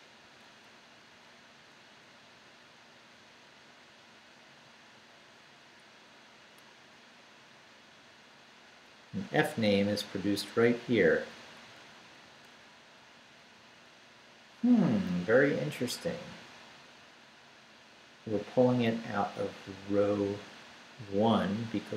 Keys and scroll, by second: 0.2 Right, 1.8 Left, 3.8 Left, 4.9 Left, 7.8 Down, 9.0 Up, 9.9 Right, 13.1 Left.